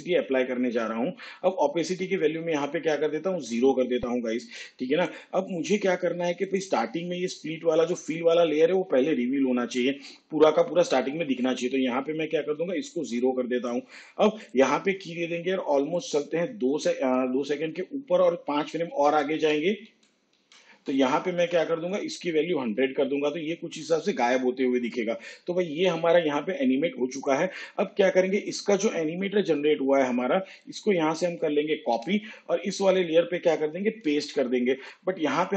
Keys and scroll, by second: 18.8 ctrl+Right, 31.6 ctrl+c, 33.8 ctrl+v.